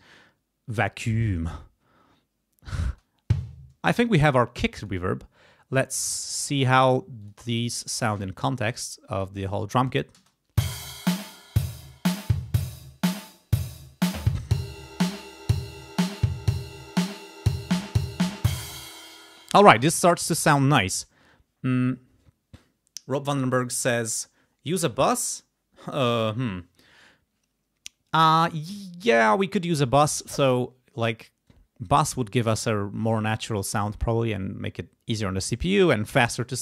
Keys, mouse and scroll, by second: 2.9 space, 3.7 space, 4.8 click, 6.5 click, 7.2 click, 10.1 space, 18.6 space, 31.7 scroll down 2, 32.3-33.3 scroll up 2.